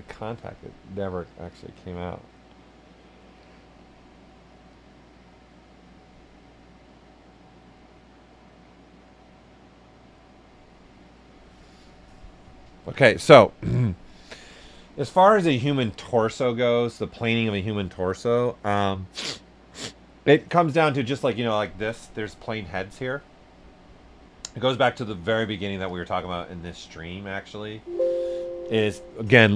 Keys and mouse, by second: 13.6 click, 17.2 ,, 22.1 click, 25.8 click.